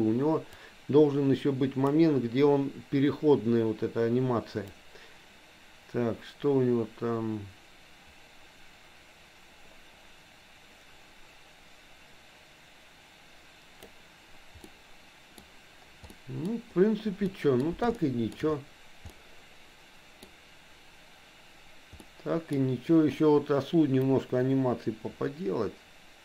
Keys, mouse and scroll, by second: 0.7-2.0 drag, 4.7-14.1 drag, 14.7 middle click, 16.1 middle click, 17.2 middle click, 18.0 shift+middle click, 19.1-20.2 middle drag, 22.0 middle click, 24.2-26.2 drag.